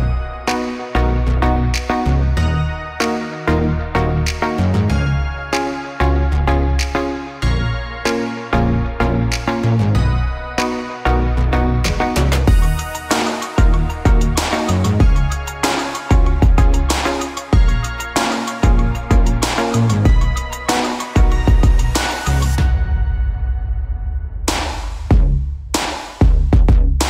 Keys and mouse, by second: 1.9 alt+shift+s, 4.1 s, 5.1 g, 6.0 g, 8.8-13.9 typing, 15.6 2, 17.2 ctrl+z, 20.4-27.0 drag, 24.5 ctrl+r.